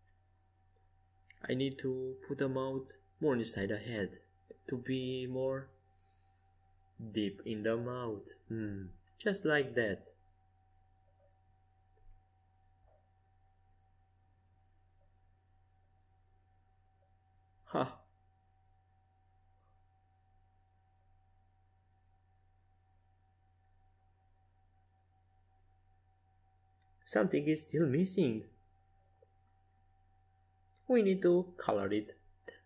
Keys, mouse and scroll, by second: 0.0 ctrl+z, 0.9 ctrl+z, 2.3-4.1 right drag, 3.2-6.0 drag, 6.0-8.6 right drag, 6.8-8.6 drag, 8.6-9.7 middle drag, 8.6 h, 12.4 KP_5, 12.7 KP_1, 13.8 KP_3, 15.4 z, 16.6-22.2 typing, 24.1-26.3 middle drag, 26.3 z, 27.3 z, 28.9-31.4 middle drag, 31.4 z, 32.0 middle click.